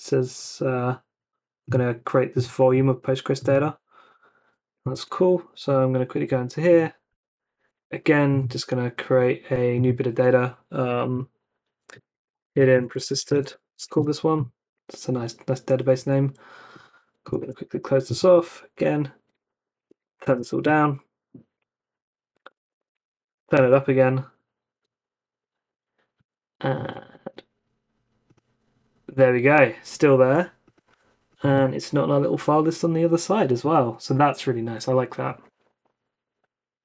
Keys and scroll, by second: 4.9 super+Tab, 11.7-14.3 typing, 17.4 super+w, 18.4 ctrl+c, 19.5 Up, 19.8-20.9 typing, 21.9 Up, 22.3-23.8 typing, 24.7 super+Tab.